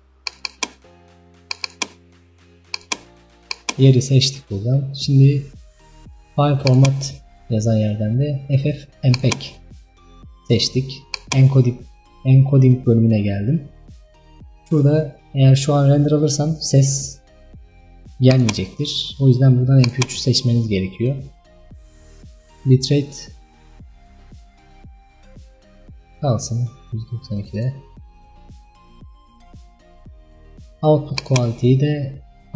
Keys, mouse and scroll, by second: 15.5 scroll down 8, 20.0-27.8 drag.